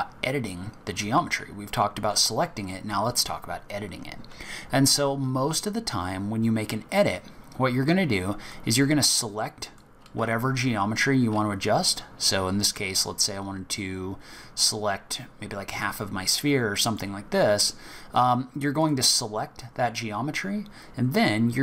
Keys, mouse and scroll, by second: 7.0 click, 8.5 click, 10.2 z, 12.2 click, 16.9 middle click, 18.8 click.